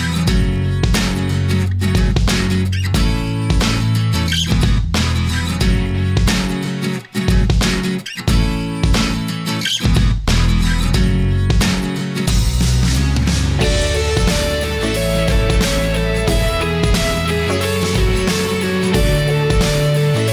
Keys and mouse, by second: 0.2-1.8 drag, 2.2 click, 3.7-4.9 drag, 5.5-6.3 middle drag, 7.6-8.9 drag, 9.2-10.9 middle drag, 14.3-16.0 middle drag, 18.3-20.3 middle drag.